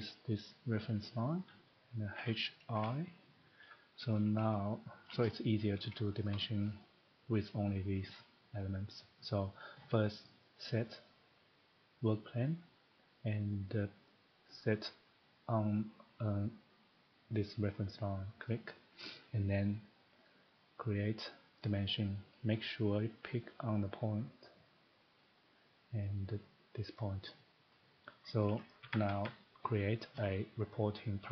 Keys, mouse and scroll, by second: 1.1 click, 2.2-2.7 typing, 4.1 click, 5.0 shift+middle click, 6.2 shift+middle click, 6.5 typing, 6.8 middle click, 8.1 middle click, 8.6 scroll, 8.7 middle click, 8.7 scroll down 1, 10.0 scroll, 10.7 click, 18.4 click, 20.3 click, 21.7 click, 22.6 scroll, 25.2 click, 26.0 scroll, 27.4 click, 28.2 click, 28.4-28.8 scroll, 28.8 Escape, 29.0 Escape, 29.2 Escape, 29.6 click, 31.0 click.